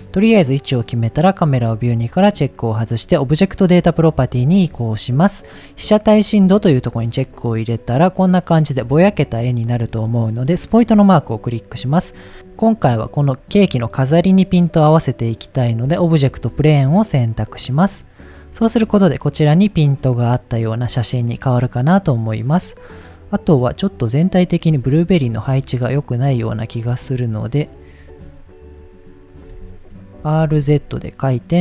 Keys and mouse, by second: 1.1 click, 7.1 click, 10.9 click, 25.9-26.7 drag, 28.0 ctrl+click, 28.9 ctrl+click, 30.5 z.